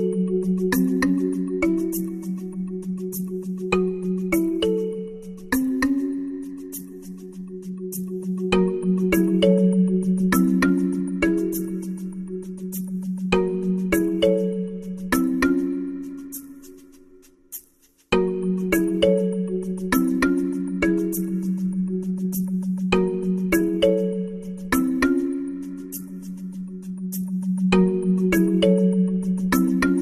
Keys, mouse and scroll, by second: 3.6 ctrl+alt+KP_0, 6.2 click, 16.7 shift+s, 19.4 shift+a, 29.9 click.